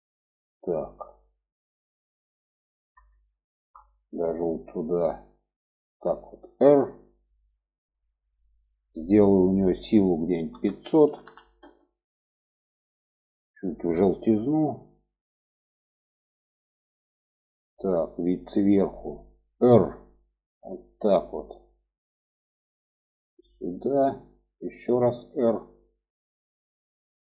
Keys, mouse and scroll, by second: 1.3 click, 3.7-4.1 shift+middle drag, 5.7-6.5 drag, 7.0 r, 9.6-12.3 drag, 11.7 0, 13.5 click, 15.7-16.1 middle drag, 16.6-17.1 middle drag, 17.4-19.2 middle drag, 20.0 r, 22.7-24.7 drag, 25.3 r.